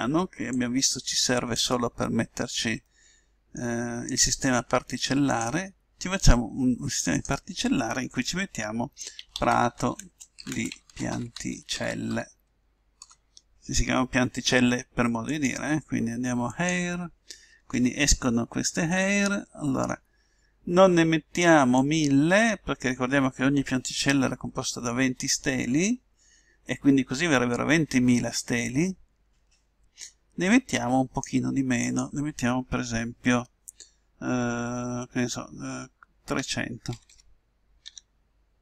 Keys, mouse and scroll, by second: 0.5-2.4 drag, 2.9-4.3 middle drag, 4.3-9.0 drag, 4.3-5.4 right drag, 12.0 l, 15.3-17.1 drag, 18.2 middle click, 19.3 middle click, 20.0-21.8 middle drag, 21.8-23.7 drag, 31.8-33.6 drag, 37.1 0.